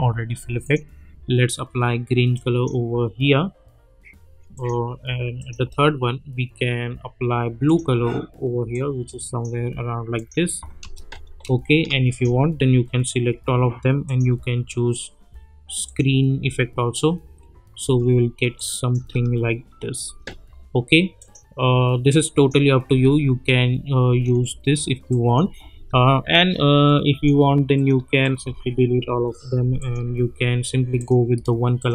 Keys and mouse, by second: 4.5 click, 7.6-9.6 drag, 10.8 space, 12.1 shift+click, 13.3 F4, 14.1 click, 16.4 space, 18.5-19.2 click, 19.0 space, 21.2 click, 22.9 space, 25.1 click, 25.4 space, 26.8-27.5 click, 28.2 shift+click, 29.8-31.9 drag.